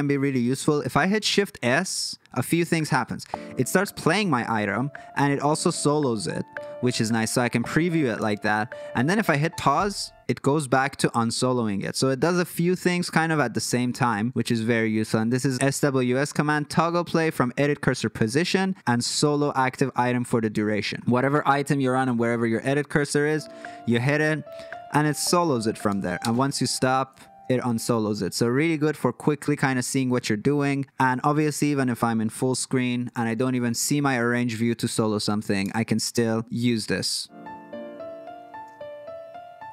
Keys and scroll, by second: 2.7 shift+s, 9.6 space, 12.2 F3, 14.3 shift+s, 23.3 shift+s, 26.2 space, 32.6 super+f, 35.6 space.